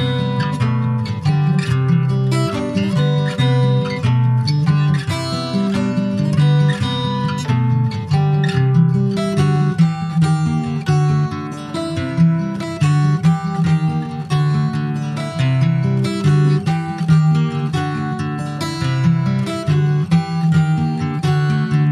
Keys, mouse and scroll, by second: 0.3 middle click, 0.8 ctrl+s, 1.0-3.1 middle drag, 5.8 alt+z, 6.3 alt+middle click, 6.8 alt+middle click, 7.2 alt+z, 7.8 alt+z, 8.2 click, 9.5 alt+z, 10.7 alt+z, 13.1 middle click, 13.6 Tab, 13.8 click, 14.3 click, 14.6-15.8 middle drag, 15.8 Tab, 16.8 p, 19.8 click, 20.5 ctrl+s, 20.5 click, 20.9-21.3 scroll down 2, 21.3 a.